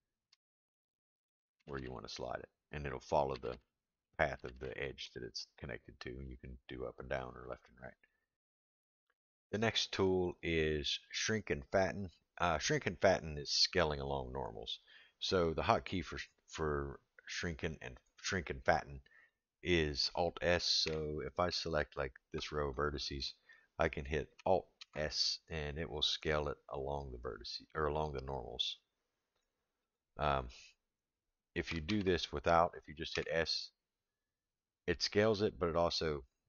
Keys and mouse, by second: 0.3 g, 1.6 g, 3.3 g, 4.4 g, 19.3-19.7 middle drag, 20.8 3, 21.8 alt+click, 22.7-23.2 middle drag, 24.8 alt+s, 31.9 ctrl+z, 33.1 s.